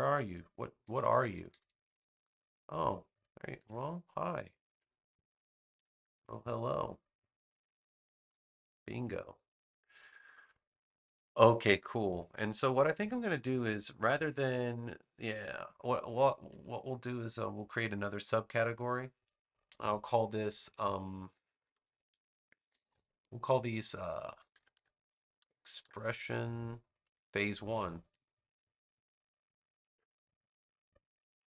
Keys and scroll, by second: 0.8 super+-, 3.5 super+x, 6.1 super+v, 24.2-28.4 typing, 29.8 Return.